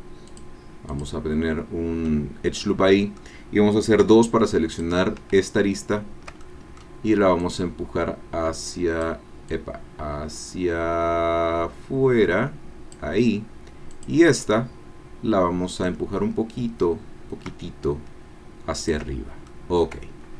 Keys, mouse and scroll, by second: 0.3 click, 1.1 click, 2.1-3.3 drag, 3.3 middle click, 4.0 2, 4.7 click, 6.4 shift+middle click, 7.4-9.2 drag, 9.5-13.1 drag, 14.2 click, 16.7-19.1 drag, 19.2 shift+scroll down 2, 19.5-20.3 drag.